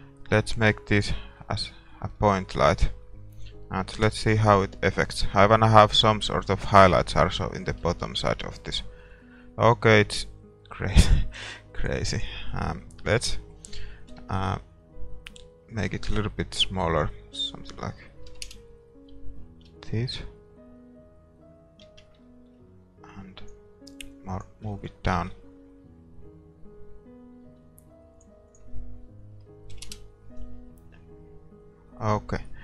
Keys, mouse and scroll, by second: 1.5-8.0 middle drag, 4.0 KP_0, 8.0 shift+z, 10.0 shift+z, 19.9 shift+z, 22.0 shift+z, 22.2-24.1 middle drag, 23.1-25.8 drag, 25.4 ctrl+s, 25.9 click, 29.9 click.